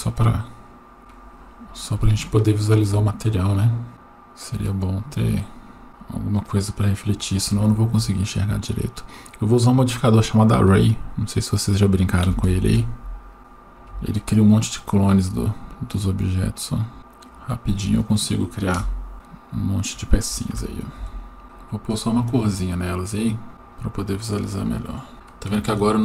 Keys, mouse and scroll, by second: 1.0-1.9 scroll up 6, 1.0 KP_0, 2.1 shift+middle click, 3.9 g, 5.9 click, 6.4-10.1 drag, 11.6-12.7 drag, 13.4-17.9 drag, 18.8 KP_0, 20.5 g, 21.4 shift+middle click, 21.9 click, 23.2 click, 25.1 shift+middle click.